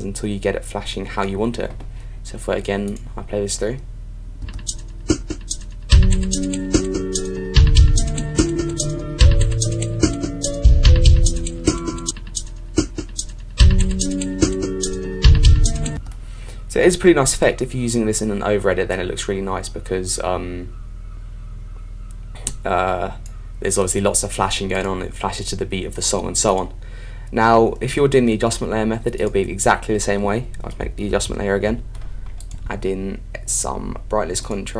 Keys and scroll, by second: 31.1 alt+super+y.